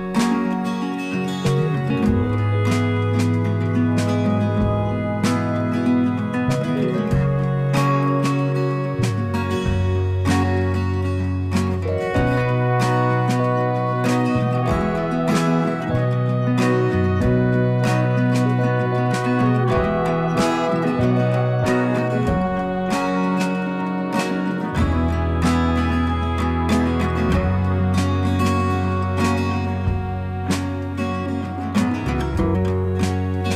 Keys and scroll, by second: 1.8 ctrl+z.